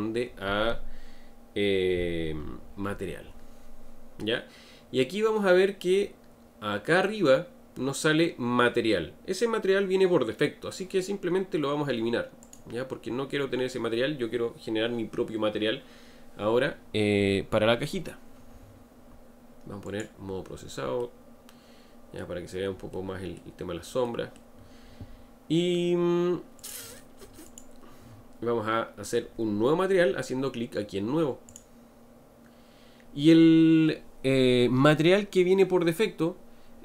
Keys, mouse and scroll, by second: 12.4-15.5 drag, 19.9 click, 21.0-26.6 middle drag, 26.6 click, 27.4 click, 31.5-34.6 drag.